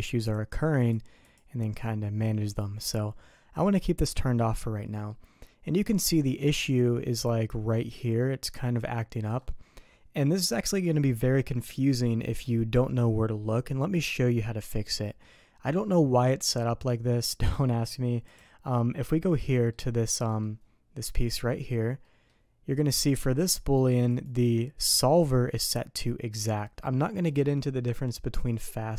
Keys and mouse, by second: 0.8 click, 1.3 click, 2.3 middle click, 4.9 middle click, 6.6 middle click, 8.2-9.4 middle drag, 10.5 click, 18.3 click, 19.6 middle click, 20.3 middle click, 21.2 middle click, 22.0 middle click, 23.6 click, 24.1 click.